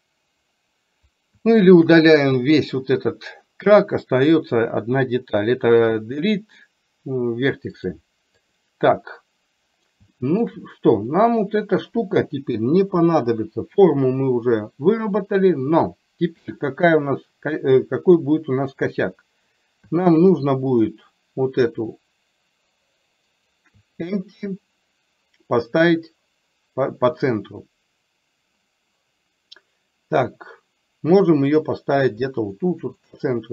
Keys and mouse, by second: 1.5 shift+middle click, 7.9-8.6 drag, 10.1 shift+middle click, 11.0 click.